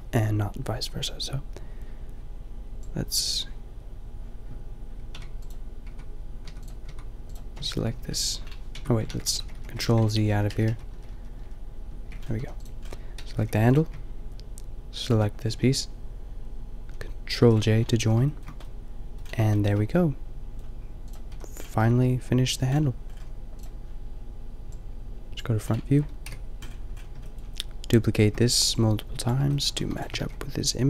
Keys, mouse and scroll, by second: 2.7-5.9 drag, 5.9 Tab, 6.5 Tab, 6.8 Tab, 7.9 ctrl+l, 8.8 Tab, 9.1 ctrl+z, 9.8 ctrl+z, 10.1 ctrl+z, 10.3 ctrl+z, 11.9 ctrl+z, 12.3 a, 12.7-13.7 drag, 13.4 g, 17.4 ctrl+j, 18.0 a, 21.1-21.9 drag, 21.3 a, 25.1 click, 26.2 KP_5, 29.5 drag, 29.8 shift+d, 30.0 g.